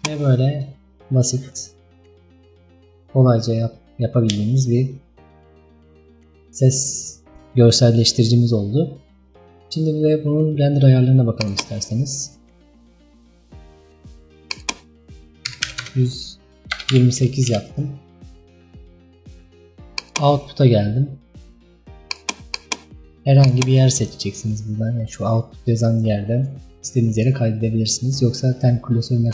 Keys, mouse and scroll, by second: 23.7 click.